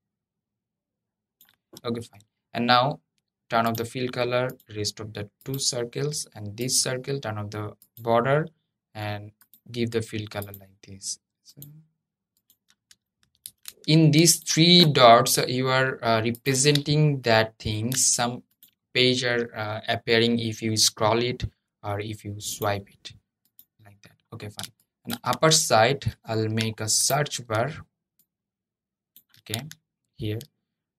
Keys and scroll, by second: 13.1 super+g.